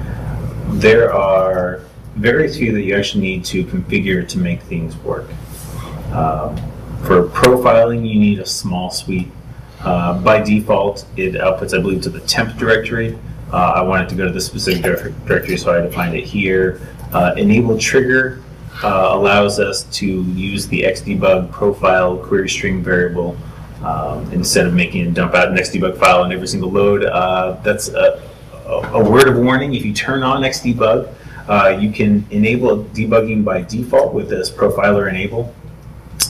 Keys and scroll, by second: 16.9 super+Tab, 21.7 super+Tab.